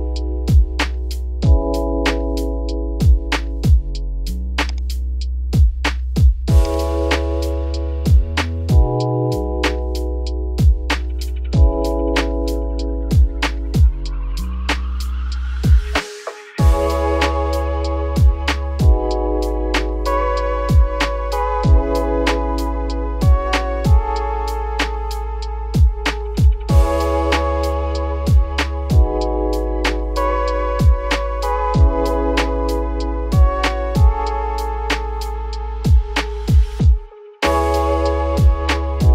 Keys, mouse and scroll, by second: 0.0 scroll down 4, 0.3 middle click, 0.5-0.9 scroll up 4, 0.9-2.4 middle drag, 2.4 `, 2.8 scroll down 1, 2.9 middle click, 3.4-4.4 scroll up 1, 4.4 x, 5.2 scroll down 3, 5.3 middle click, 5.7 a, 6.0-7.5 middle drag, 7.5 shift+n, 8.0 Tab, 8.1-9.2 scroll down 11, 9.2 middle click, 9.6 alt+x, 11.6-12.0 middle drag, 12.0-12.4 scroll up 1, 12.4-12.7 shift+middle drag, 12.7-15.5 scroll up 2, 15.5-17.4 drag, 17.4 scroll down 3, 17.5-18.0 middle drag, 18.0 scroll down 3, 18.2-19.8 middle drag, 19.8 click, 20.4 click, 20.8 click, 21.4 middle drag, 21.6-22.6 scroll up 7, 23.4 click, 24.8 click, 25.7 click, 27.1 click, 28.0 middle click, 28.5-29.3 scroll down 6, 29.3 /, 29.9 middle drag, 30.2-31.2 scroll up 2, 31.2 click, 31.7 scroll up 1, 31.8 g, 33.4 scroll down 2, 33.5-34.2 middle drag, 34.2 scroll down 5, 34.4 shift+middle drag, 34.6 scroll up 2, 34.9 scroll down 2, 35.0-35.4 middle drag, 35.4-36.3 scroll up 4, 36.3 x, 37.2 shift+middle drag, 37.4-37.8 scroll up 6, 38.1 click.